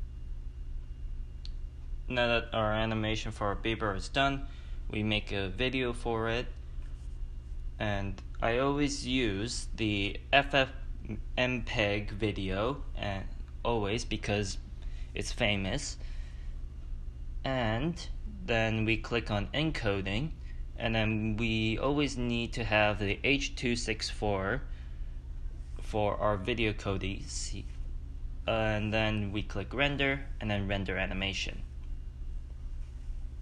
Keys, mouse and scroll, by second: 1.4 click, 4.7-26.6 drag, 7.9 shift+middle click, 9.0-20.8 middle drag, 21.2-22.3 middle drag, 26.6-27.3 scroll down 5, 32.5-32.8 scroll down 1, 32.8 click.